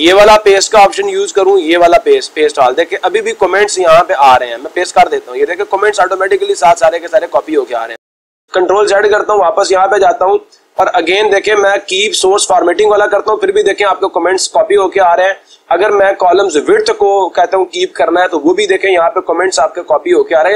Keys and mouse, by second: 0.6 click, 4.0-5.1 drag, 8.1 ctrl+z, 10.2 click, 20.2-20.5 drag.